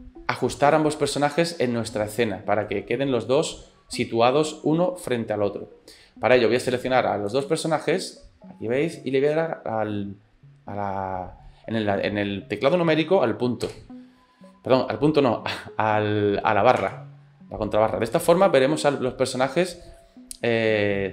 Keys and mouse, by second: 0.8-2.7 middle drag, 3.0 shift+middle click, 3.5-4.7 middle drag, 13.7 KP_Decimal, 16.9 KP_Divide, 18.5-19.7 middle drag, 20.0-21.1 middle drag.